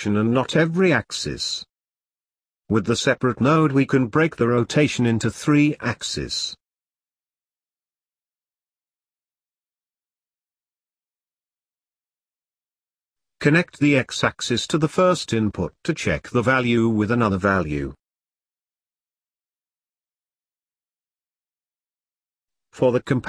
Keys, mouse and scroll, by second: 0.0 click, 3.3 click, 5.3 shift+a, 9.8 click, 11.4 click, 13.2 click, 14.0 click, 15.0-16.8 scroll up 2, 16.8-18.0 middle drag, 18.0 click, 23.1-23.2 drag.